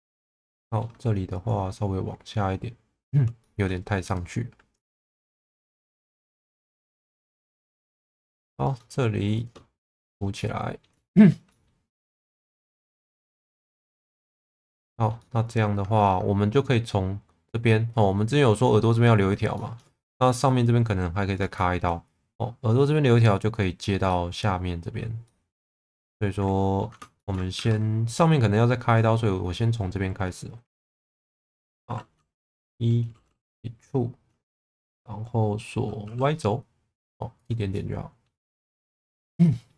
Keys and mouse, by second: 0.2 alt+middle click, 3.4 shift+middle click, 4.0 click, 4.8 click, 7.3 middle click, 8.1 2, 8.6 click, 9.8 f, 10.3 middle click, 11.1 shift+middle click, 11.5 middle click, 12.2 shift+middle click, 12.6 middle click, 13.7 shift+middle click, 14.4 middle click, 15.2 middle click, 19.5 shift+middle click, 21.5 shift+middle click, 24.0 middle click, 25.2 middle click, 25.9 middle click, 27.1 shift+middle click, 27.5 2, 32.5 e, 36.0 y, 37.3 click, 37.7 middle click, 38.8 1, 39.4 middle click.